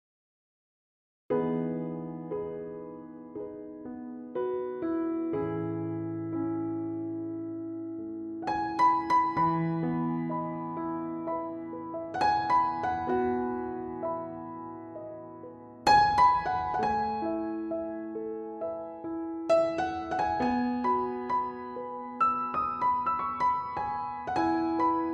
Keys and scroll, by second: 11.0 super+s, 12.4 super+-, 12.6 super+s, 15.1 super+j, 22.2 ], 23.1 shift+[, 23.5 ], 24.1 super+-.